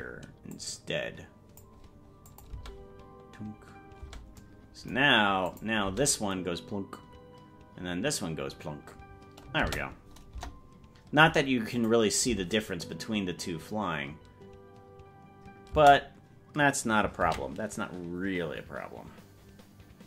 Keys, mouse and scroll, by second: 0.5-1.7 drag, 2.4-4.2 drag, 2.7 space, 4.2 space, 5.6 click, 5.9 space, 9.7 space, 10.3 KP_0, 11.8 click, 12.3 space, 15.9 space.